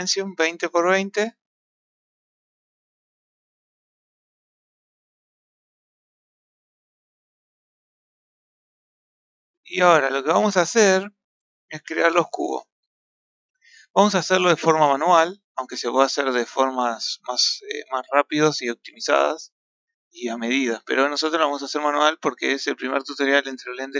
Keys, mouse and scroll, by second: 5.2-6.8 ctrl+middle drag, 7.0-9.0 ctrl+middle drag, 9.0-9.3 scroll up 1, 9.6-10.3 middle drag, 10.3-10.8 scroll down 4, 10.8-12.5 scroll up 3, 12.5 KP_7, 15.1-15.6 scroll down 3, 15.6 scroll up 1, 16.3-20.1 shift+middle drag, 21.3 z.